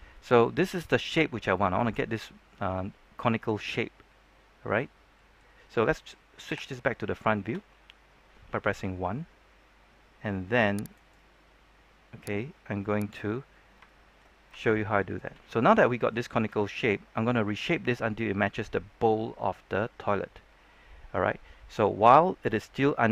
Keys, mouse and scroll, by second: 0.6 scroll up 1, 0.8-5.9 middle drag, 6.4 KP_1, 10.9-12.0 right drag, 12.2 click, 13.2-13.5 scroll down 1, 13.5 scroll up 1, 13.8 shift+middle click, 14.3 scroll up 1, 14.5 shift+middle click, 15.6 scroll down 1, 15.8 shift+middle click.